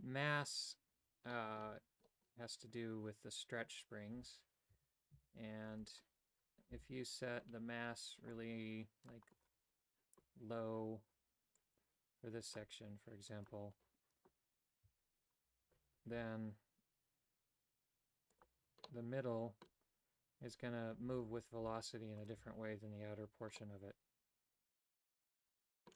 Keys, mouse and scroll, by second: 1.4 middle click, 2.1 middle click, 4.3 a, 4.8 a, 5.2 c, 6.8 c, 11.6-12.8 drag, 13.4 click, 15.0 a, 15.7 alt+right click, 16.2 g, 18.9 middle click, 21.2 right click, 21.7 g, 22.5 a, 23.6-25.9 middle drag.